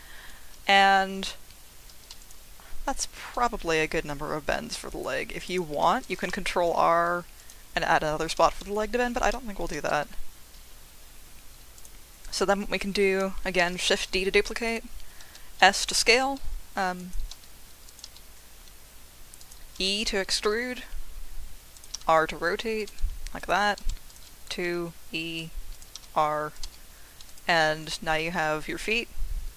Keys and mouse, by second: 2.2 click, 3.4 g, 5.4 click, 6.2 ctrl+r, 8.2 click, 8.6 ctrl+z, 9.9 2, 11.8-13.5 drag, 13.6 shift+d, 14.6 click, 15.2 s, 15.8 click, 16.0 g, 17.0 click, 17.3 s, 17.9 click, 18.0 g, 19.4 click, 19.9 e, 21.7 click, 21.9 r, 22.8 click, 23.4 click, 23.4 g, 23.8 2, 24.7 e, 25.7 click, 25.9 r, 26.5 click, 26.6 g, 27.3 click.